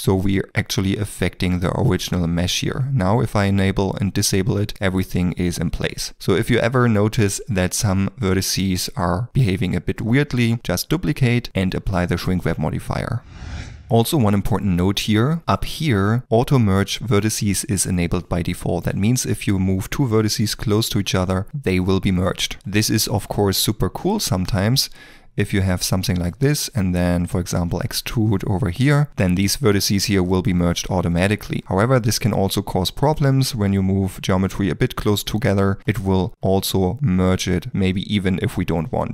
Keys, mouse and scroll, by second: 1.8 middle click, 5.9 middle click, 9.3 g, 14.9 ctrl+middle click, 18.6 ctrl+middle click, 21.1 g, 22.6 ctrl+z, 22.7 ctrl+middle click, 23.2 shift+middle click, 24.4 shift+click, 25.0 e, 26.2 shift+middle click, 26.5 e, 27.1 middle click, 29.1 1, 30.1 g, 31.2 Escape, 35.1 g, 36.0 g.